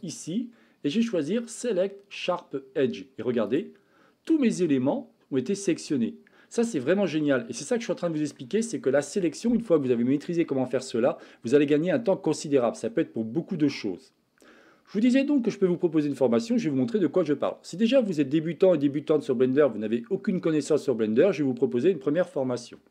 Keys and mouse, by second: 0.2-3.6 drag, 4.3-6.9 middle drag, 7.5 middle click.